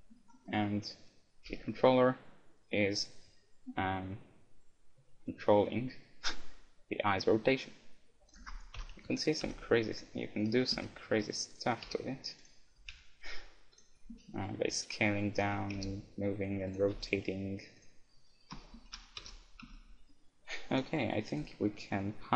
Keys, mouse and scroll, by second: 0.5 middle click, 1.6 g, 1.8 middle click, 8.3-19.6 drag, 8.8 KP_1, 9.4 r, 10.8 s, 11.8 g, 13.1 r, 14.2 s, 15.8 g, 17.0 r, 18.8 alt+s, 19.0 alt+r, 19.6 a, 19.8-20.8 middle drag, 20.8 click, 21.7-22.3 right drag.